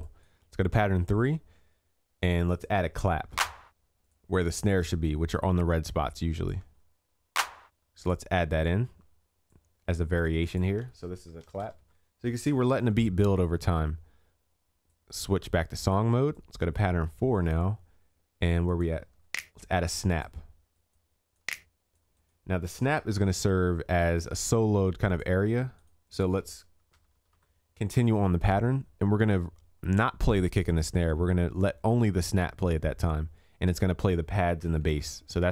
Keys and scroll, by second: 12.6 ctrl+s, 23.0 ctrl+s, 34.7 ctrl+s.